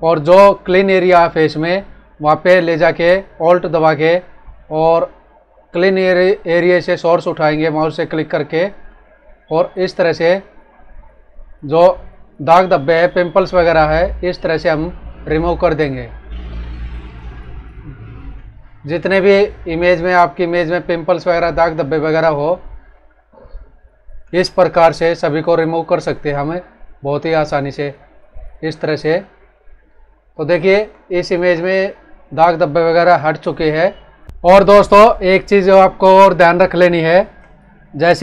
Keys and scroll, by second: 30.4 ctrl+-, 36.8 ctrl+=, 37.3 space.